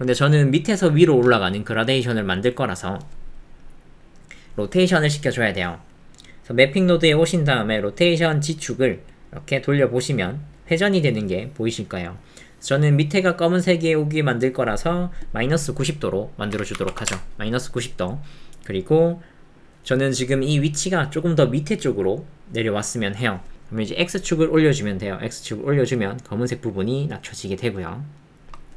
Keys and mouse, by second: 3.7 middle click, 6.0 middle click, 9.0-14.6 drag, 15.3-17.1 drag, 18.6 middle click, 24.6-28.3 shift+drag.